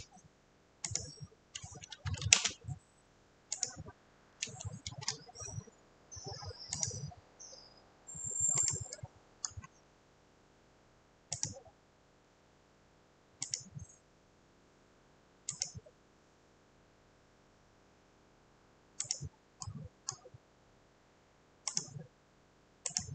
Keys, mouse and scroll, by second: 0.0-0.5 typing, 0.0 click, 0.0-0.4 scroll, 1.0 click, 2.0 typing, 3.7 click, 5.0 F8, 6.8 click, 8.8 click, 9.5-9.9 scroll, 11.5 click, 13.6 click, 15.6 click, 19.1 click, 20.3-20.7 scroll, 21.8 click, 23.0 click.